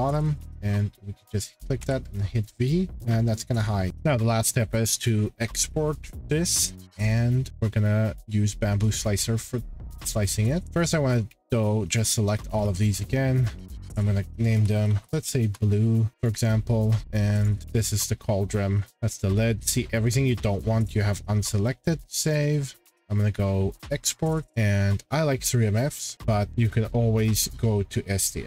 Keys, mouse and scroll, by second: 0.7 click, 1.8 v, 2.4 click, 2.5-3.0 scroll, 2.8 shift+middle click, 3.6 shift+middle click, 3.9 scroll, 3.9 click, 8.9-10.2 drag, 12.5 shift+middle click, 13.7 click, 14.3-15.5 typing, 15.3 shift+scroll, 16.2 click, 17.0 click, 17.4 Return, 17.4 click, 17.6 click, 18.9 click, 20.1 click, 22.0 click, 22.2 click, 23.0 click, 24.4 click, 24.9 click, 26.0 click, 26.7 click, 27.8-28.4 scroll.